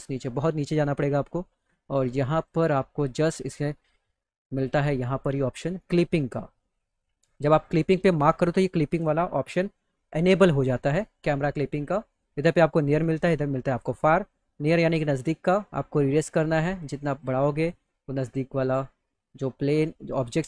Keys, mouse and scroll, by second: 0.8-2.4 drag, 8.3 click, 14.7-17.2 drag, 14.7-17.2 right drag, 19.3 click.